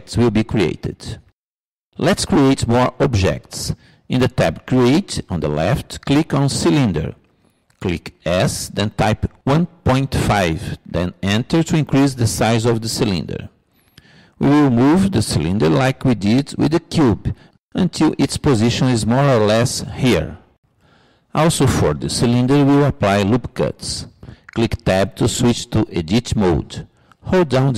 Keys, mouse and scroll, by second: 4.4-6.1 drag, 7.1-8.4 drag, 8.5-10.2 drag, 10.6 s, 17.4-19.2 drag, 25.5 Tab.